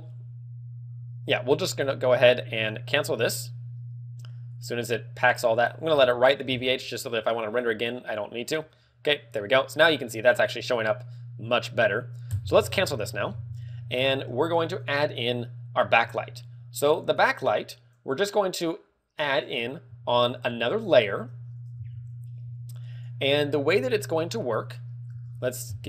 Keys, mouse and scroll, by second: 13.1 alt+Escape.